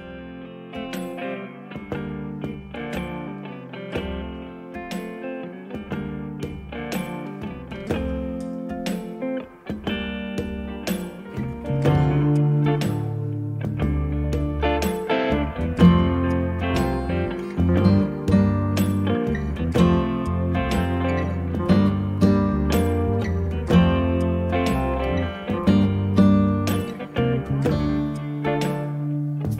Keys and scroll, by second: 1.4 m, 1.6 space, 22.3 s.